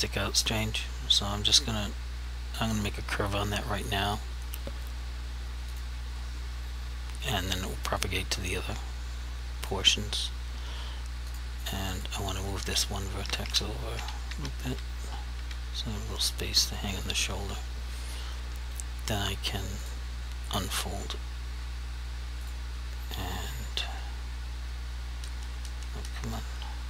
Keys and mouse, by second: 1.6 click, 5.8 click, 8.1 click, 11.4 click, 14.0 Left, 19.9 click, 20.6 right click, 22.5 click.